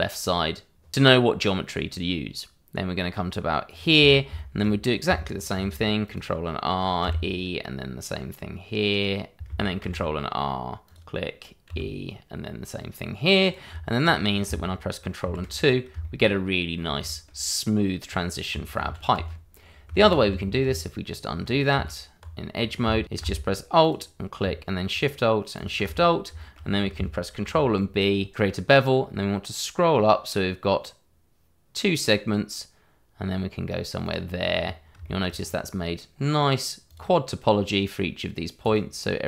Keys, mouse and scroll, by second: 3.6 click, 4.3 shift+middle click, 5.5 ctrl+r, 6.0 click, 7.0 e, 9.8 ctrl+r, 10.8 click, 11.6 e, 13.4 click, 13.7 Tab, 14.2 scroll down 1, 15.2 ctrl+2, 15.6-15.9 scroll down 1, 16.0 shift+middle click, 16.3-16.7 scroll up 1, 17.0 shift+middle click, 18.2 scroll down 1, 18.8 ctrl+z, 20.0 ctrl+z, 21.7 Tab, 22.5-22.8 scroll up 1, 23.0 click, 23.8 alt+click, 24.5 click, 24.9 click, 25.5 alt+shift+click, 25.8 click, 26.3 shift+middle click, 26.6-27.2 scroll up 1, 27.3 ctrl+b, 30.0-30.5 scroll up 1, 34.0 click, 34.5-34.9 scroll up 1, 35.0 shift+middle click, 35.3-35.8 scroll up 1, 36.8 click.